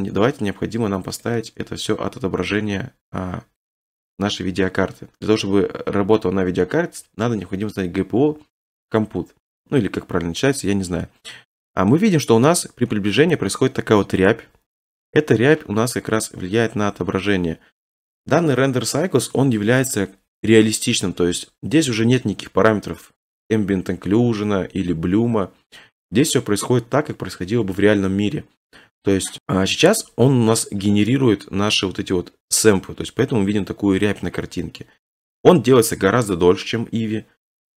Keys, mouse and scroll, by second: 1.2-3.3 right drag, 3.6-5.7 right drag, 11.7-12.8 scroll, 12.8-13.2 scroll, 13.8-14.5 scroll, 22.7-23.8 scroll, 23.8 middle click, 25.4 middle click, 25.7 middle click, 25.7 middle click, 25.9 middle click, 26.1 middle click.